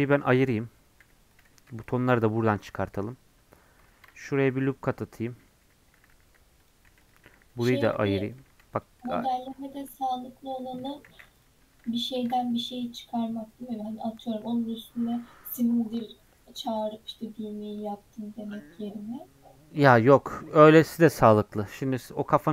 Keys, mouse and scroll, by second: 1.4 p, 1.5 Tab, 1.8 click, 2.3 Tab, 3.9 ctrl+r, 6.0 g, 6.9 3, 7.1 click, 8.3 p, 8.7 click, 9.4 Tab, 10.8 Tab, 11.4 ctrl+a, 11.6 Tab, 12.1 ctrl+r.